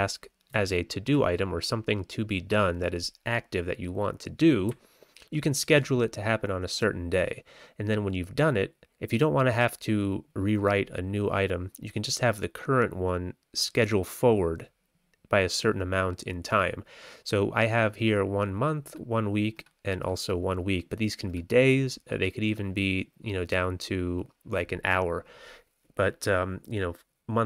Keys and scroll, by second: 0.5 Left, 1.0 Left, 1.0 Left, 4.6 Right, 5.1 Right, 5.2 Right.